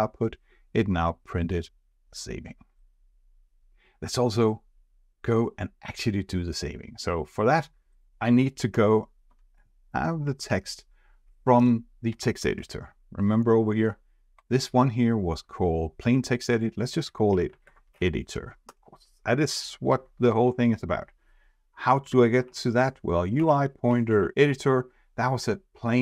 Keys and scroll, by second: 12.4 shift+F4, 20.2 shift+F4.